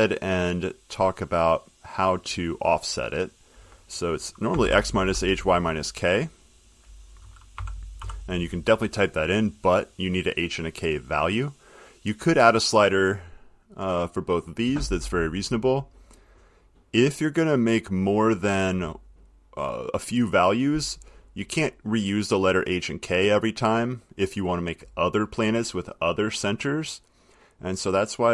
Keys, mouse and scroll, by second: 1.8 click, 3.5 click, 4.5-5.3 typing, 6.8 click, 7.7 -, 8.1 k, 12.3 click, 14.1 click, 15.5 click, 17.8 click, 23.0 click, 24.6 click.